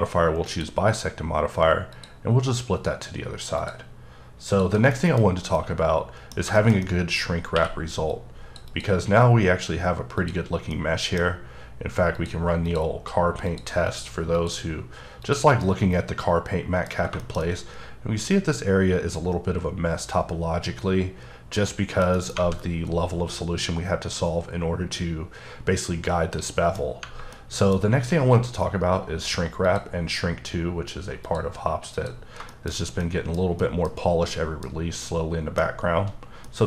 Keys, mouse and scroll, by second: 0.4 click, 1.9 click, 3.6 click, 4.5 click, 4.9 middle click, 5.2-5.6 scroll up 3, 5.6 middle click, 6.4 scroll down 2, 6.6 shift+middle click, 7.2-7.5 scroll up 2, 7.5 q, 8.1 click, 8.7 double click, 10.2 click, 10.4 scroll down 2, 10.7 middle click, 11.2 scroll up 1, 12.2 click, 12.7 click, 13.5 click, 13.9 click, 14.4 click, 15.2 click, 15.6-16.9 middle drag, 16.9 scroll up 2, 17.2 shift+middle click, 17.4-22.1 shift+middle drag, 22.1 middle click, 22.4-24.7 scroll up 3, 25.9-26.3 scroll down 2, 26.3 middle click, 26.8 scroll down 2, 27.3 middle click, 29.6 click, 31.2 click, 31.9 click, 32.5 shift+middle click, 32.7-33.0 shift+scroll down 2, 33.0 middle click, 33.6 middle click, 34.0-34.3 scroll up 1, 34.3 middle click, 35.0 middle click, 36.4 middle click.